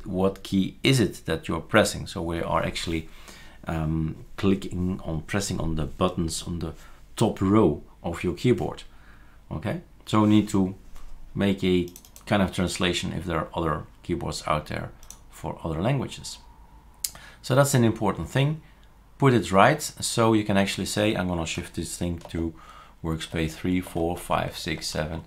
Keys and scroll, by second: 22.3 shift+super+3, 23.4 shift+super+4, 23.9 shift+super+5, 24.2 shift+super+6, 24.6 shift+super+6.